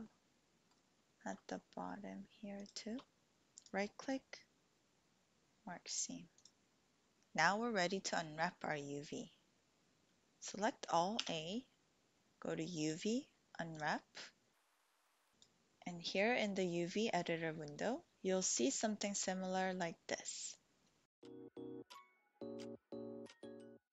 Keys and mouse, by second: 0.1 middle click, 3.8-6.0 drag, 11.2 a, 12.8-13.8 drag, 13.8 typing, 14.8 click.